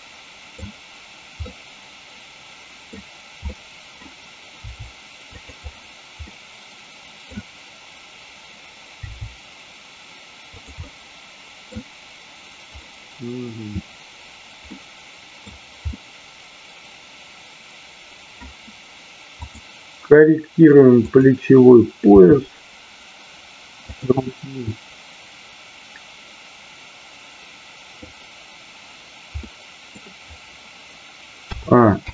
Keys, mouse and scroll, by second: 1.4-2.9 middle drag, 3.4 scroll up 1, 3.6-3.9 middle drag, 4.6 r, 6.2-7.3 middle drag, 10.6 click, 10.7 scroll up 1, 10.9-11.7 middle drag, 12.8-13.4 middle drag, 14.6-15.6 middle drag, 15.9-18.3 middle drag, 19.4 click, 20.9 click, 22.2 r, 23.9 drag, 24.2-28.1 middle drag, 29.4-29.9 middle drag.